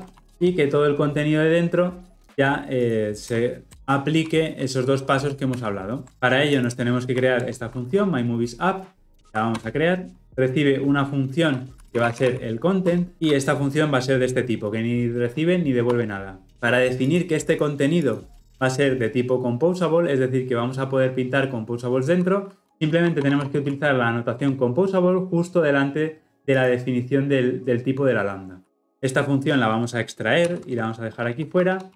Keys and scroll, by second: 5.6 ctrl+alt+l, 7.4 alt+Return, 16.0 Return, 22.7 ctrl+z, 24.4 Return, 30.5 ctrl+x.